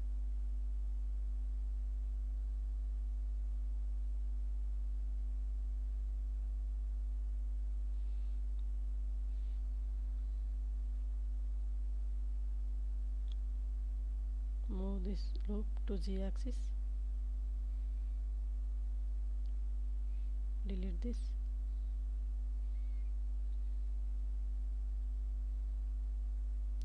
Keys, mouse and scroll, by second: 0.2 click, 1.7 KP_7, 3.1 shift+middle click, 4.0 Tab, 5.2 shift+middle click, 6.4 Tab, 7.1 ctrl+s, 7.7 Tab, 8.0-10.3 middle drag, 12.9 g, 13.2 z, 16.7 shift+click, 18.0 2, 19.0 alt+click, 20.1 ctrl+x, 22.6 Tab, 23.1-24.6 middle drag, 24.8 Tab, 25.4 a, 26.0 g, 26.2 z.